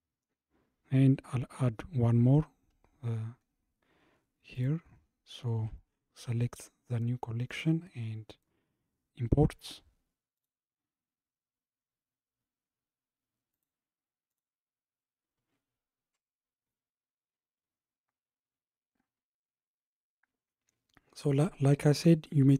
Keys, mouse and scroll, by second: 3.4-3.7 scroll up 4, 3.7-4.6 scroll down 9, 4.6 click, 7.5-10.6 drag.